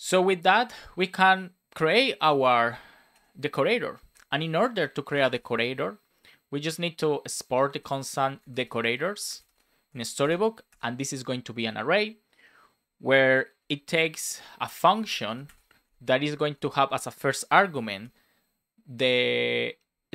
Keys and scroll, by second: 4.1 Return, 4.7 space, 9.8 space, 11.5 Return, 13.5 shift+9, 14.8 shift+s, 15.7 Right, 15.8 space, 16.5 shift+space, 17.4 shift+9, 17.9 Return.